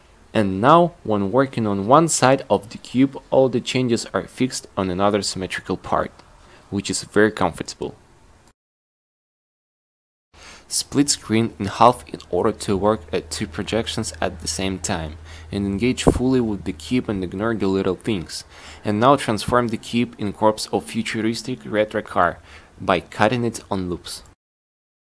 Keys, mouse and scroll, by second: 12.1 click, 12.5 click, 14.2 y, 16.0 t, 19.1 click, 19.2 q, 20.7-21.9 drag, 21.9 t, 23.9 a, 24.1 c, 24.6 a, 24.9 c.